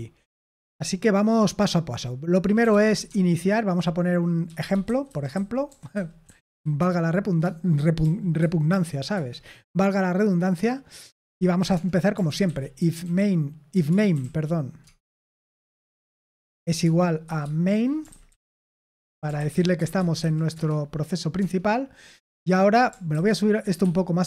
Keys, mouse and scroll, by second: 2.4-9.5 typing, 11.2-14.6 typing, 16.0-20.6 typing, 21.3 Tab, 23.0 ctrl+n, 23.7 Escape.